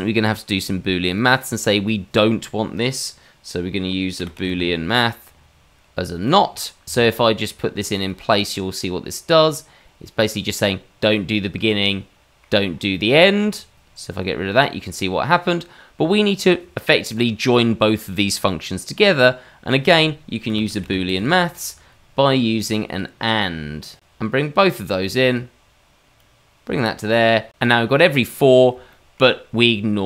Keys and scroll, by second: 4.4 o, 20.5 o.